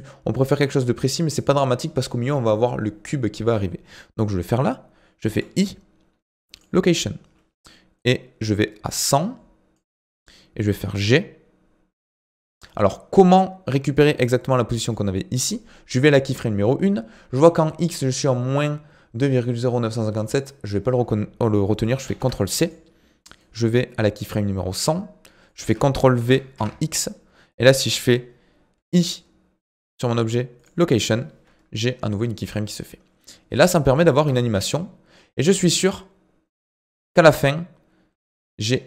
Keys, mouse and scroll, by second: 4.0-5.3 scroll down 3, 7.9-10.2 drag, 10.2-12.9 scroll down 2, 12.9-15.9 drag, 20.1-22.6 drag, 23.4-28.5 drag, 33.2 click, 34.1 space, 38.1 space.